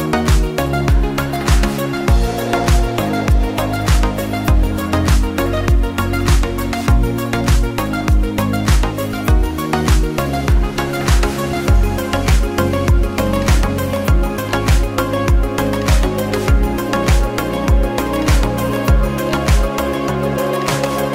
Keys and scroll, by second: 5.5 0, 5.7 Return.